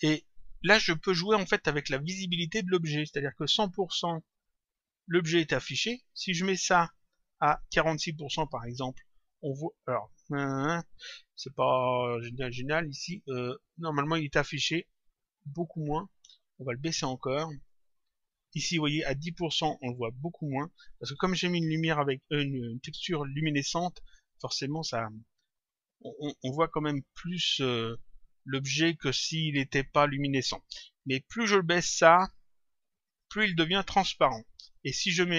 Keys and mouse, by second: 4.2 click, 6.5 click, 8.6 click, 15.6 click, 17.6 click, 31.4 click, 33.0 click.